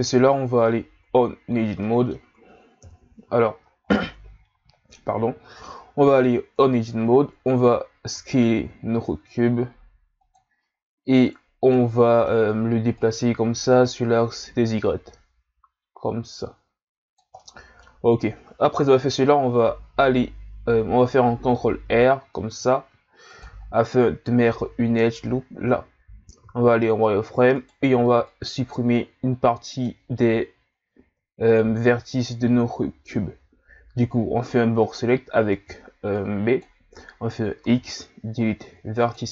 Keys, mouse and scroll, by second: 0.7-1.3 scroll down 5, 1.3-1.8 scroll up 1, 1.8-2.9 middle drag, 2.9 KP_1, 3.8 scroll down 6, 4.3 scroll up 4, 5.3 shift+scroll up 5, 6.1 Tab, 6.8-7.4 shift+scroll up 3, 8.1 s, 11.7-12.9 middle drag, 12.9 click, 17.4-18.7 middle drag, 18.7 KP_1, 21.7 ctrl+r, 25.4-26.5 scroll down 3, 26.5 z, 27.5 right click, 27.9 b, 32.2 ctrl+scroll up 2, 35.6 b, 37.6 x.